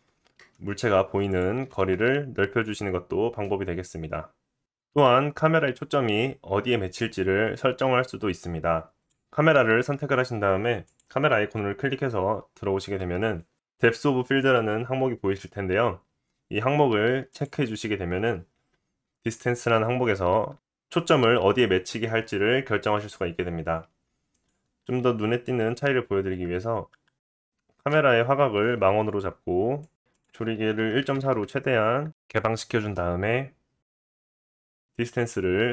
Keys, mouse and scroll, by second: 0.4 KP_0, 1.4-8.9 middle drag, 1.7 g, 8.9 click, 9.1-10.8 middle drag, 10.8-35.7 drag.